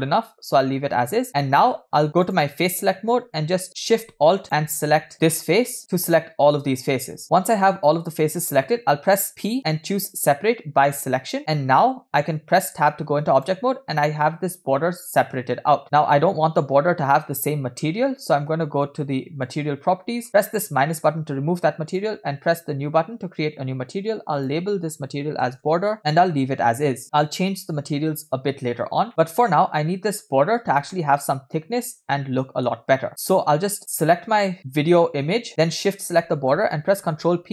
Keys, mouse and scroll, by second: 5.1 alt+shift+click, 22.0 drag, 24.9-28.8 shift+drag, 29.1-29.6 shift+middle drag, 30.9-33.1 middle drag, 33.1 click, 35.8 shift+click, 37.1 ctrl+p.